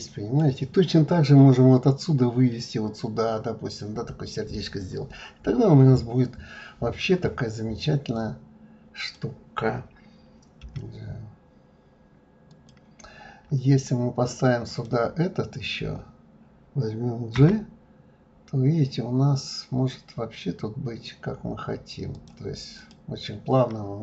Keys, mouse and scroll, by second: 8.1-10.6 drag, 10.6 g, 14.7 click, 17.4 g, 22.8 click.